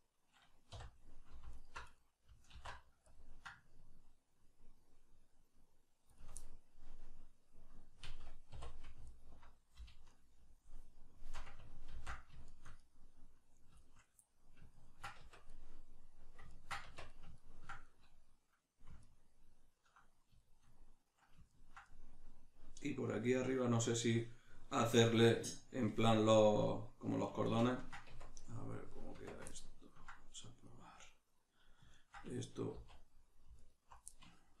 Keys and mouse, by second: 0.7 3, 1.5 alt+right click, 2.0-6.2 middle drag, 2.5 alt+e, 6.2 shift+click, 6.4-9.1 middle drag, 8.5 2, 9.1 alt+right click, 10.1 alt+shift+right click, 11.9 ctrl+x, 12.5-15.5 shift+middle drag, 15.2 Tab, 16.9 Tab, 17.1 middle click, 20.4 shift+middle click, 25.9-28.9 middle drag, 28.1 Tab, 28.9 right click, 29.1 Tab, 29.5-33.6 ctrl+middle drag, 32.7 z, 33.6 alt+right click, 34.1-34.6 middle drag.